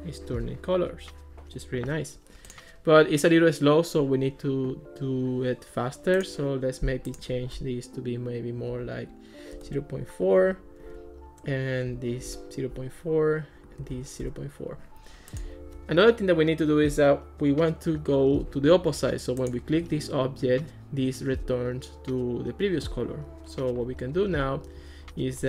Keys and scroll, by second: 8.7 ., 9.6 4, 9.7 Return, 10.9 super+c, 12.1 super+v, 12.3 Return, 14.0 super+v, 14.2 Return.